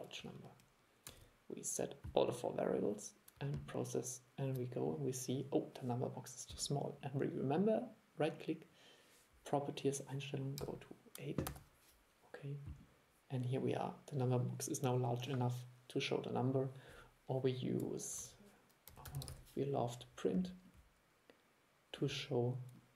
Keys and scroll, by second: 1.2 super+e, 18.3 super+1.